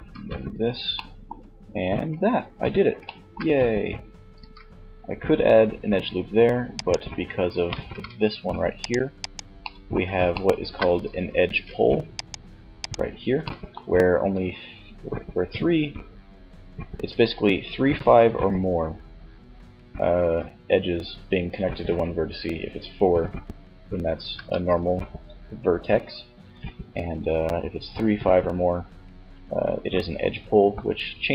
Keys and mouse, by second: 1.0 f, 3.4 ctrl+r, 6.9 ctrl+Tab, 10.4 ctrl+Tab, 13.6 right click, 17.5-20.9 middle drag.